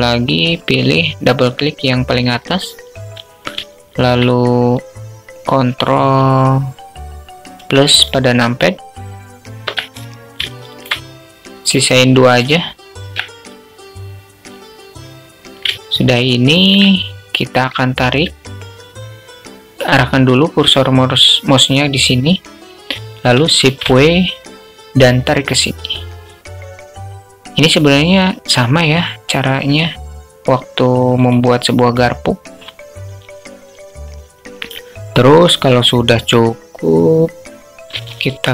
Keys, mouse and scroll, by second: 1.7 click, 3.1 alt+shift+click, 5.6-9.1 ctrl+KP_Add, 9.9 alt+shift+click, 11.4 ctrl+KP_Subtract, 15.2 shift+click, 22.9 shift+w.